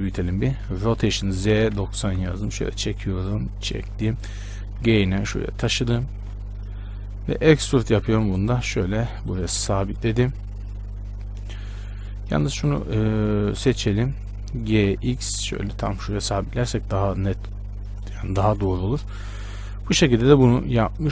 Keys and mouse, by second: 0.7 r, 2.9-7.5 drag, 4.8 g, 7.5 e, 13.8 ctrl+l, 15.0 g, 17.2 Tab, 18.7 shift+space.